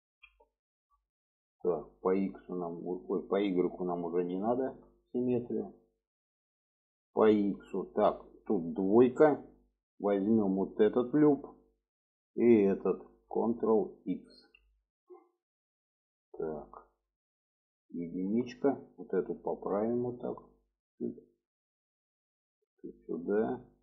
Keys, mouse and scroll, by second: 0.1 alt+z, 0.6 shift+middle click, 3.5 click, 4.0 shift+middle click, 5.2 shift+middle click, 6.4 middle click, 7.4 shift+middle click, 8.1 middle click, 9.2 2, 10.9 alt+shift+click, 11.4 middle click, 12.8 alt+shift+click, 14.4 ctrl+x, 15.2-16.2 middle drag, 16.8 alt+middle click, 18.4 1, 18.9 click, 19.5 click, 21.7 click, 22.3 click, 23.7 click.